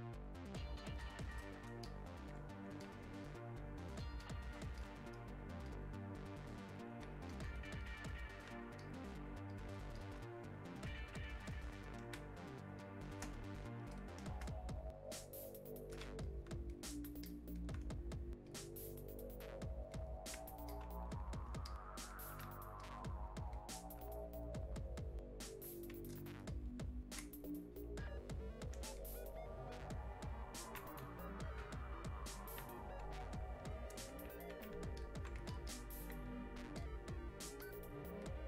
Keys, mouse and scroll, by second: 12.2 space, 12.8 click, 12.9 space, 13.4 space, 13.9 click, 14.4 space, 16.2-26.5 alt+drag, 26.5-38.4 ctrl+drag.